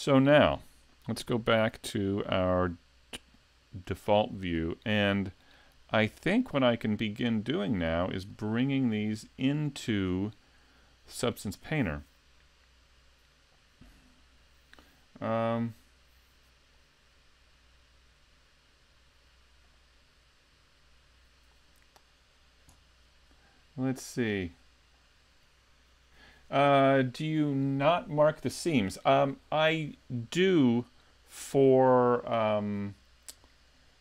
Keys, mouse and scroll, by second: 3.4 click, 4.2 shift+middle click, 4.9 scroll up 2, 5.3 shift+middle click, 5.8-6.2 scroll down 2, 6.2 shift+middle click, 7.7 middle click, 8.9 middle click.